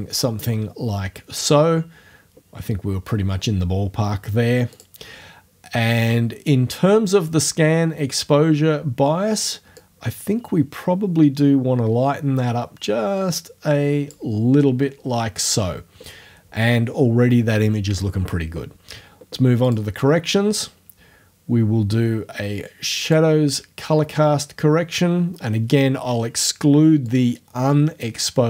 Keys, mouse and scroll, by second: 4.8 click, 9.8-14.3 drag, 19.7 click, 23.1 click, 27.1-28.4 drag.